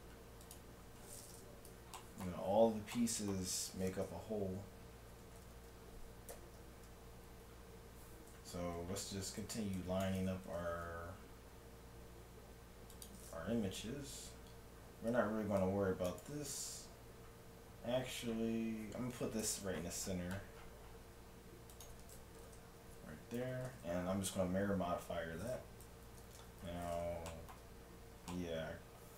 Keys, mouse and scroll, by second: 1.0-5.2 middle drag, 5.2 Tab, 5.6 z, 6.3 KP_1, 6.6 z, 8.5 Tab, 9.2 a, 9.5 c, 10.0-12.0 drag, 10.5 g, 14.3 a, 14.5 a, 14.9 a, 15.3 c, 19.4 n, 20.9 middle click, 21.8-23.6 drag, 23.7 n, 24.9-26.3 middle drag, 26.1 KP_7, 27.4-28.6 middle drag, 28.9 middle click, 29.0 middle click.